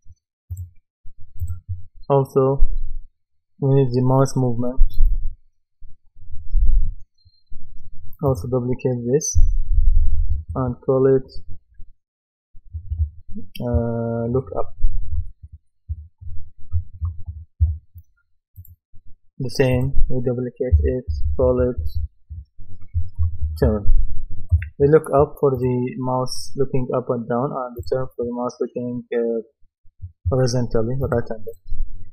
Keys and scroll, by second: 9.4 Right, 9.7 BackSpace, 14.8-17.3 typing, 17.6 Return, 20.7 Right, 21.1 BackSpace, 22.9-24.4 typing, 24.5 Return.